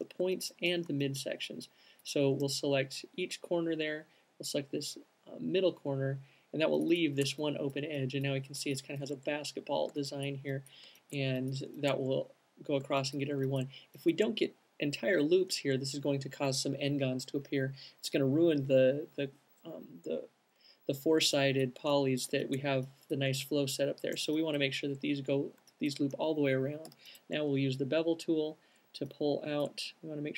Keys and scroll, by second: 27.2 alt+shift+b.